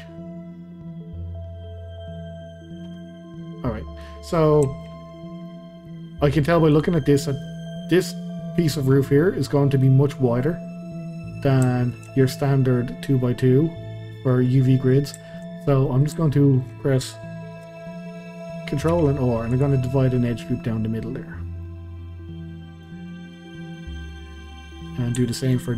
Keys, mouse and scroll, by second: 0.0-4.3 middle drag, 4.3-4.7 scroll down 2, 4.7 shift+middle click, 5.0-5.4 scroll up 2, 5.4-6.7 middle drag, 6.7 click, 7.0-11.4 middle drag, 11.4 scroll down 2, 11.7-15.6 shift+middle drag, 15.6 scroll up 2, 15.9-18.9 shift+middle drag, 18.9 ctrl+r, 20.2-23.5 middle drag, 23.5 scroll up 2, 23.8-25.7 middle drag.